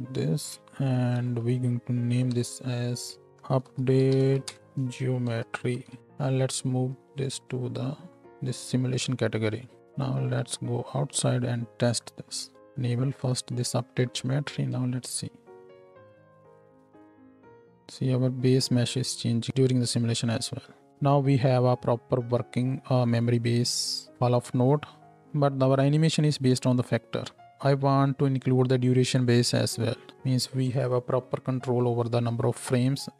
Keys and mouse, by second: 0.4-3.2 ctrl+drag, 1.1 ctrl+h, 2.3 n, 3.2 shift+middle click, 4.5-9.8 middle drag, 9.8-12.6 drag, 9.8 n, 10.3 Tab, 12.6 shift+Right, 12.6 shift+Left, 13.2-33.1 drag, 14.8 space, 15.2-33.1 middle drag, 15.2-33.1 right drag, 20.9 shift+Left, 20.9 space.